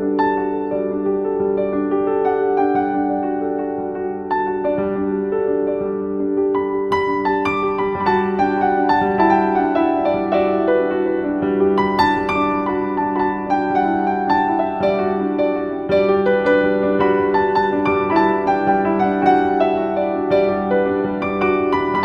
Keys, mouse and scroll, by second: 1.4 Return, 3.0 right click, 4.4-7.4 drag, 7.4 right click, 8.2 click, 9.5-21.0 shift+drag, 21.2-22.0 typing, 21.8 click.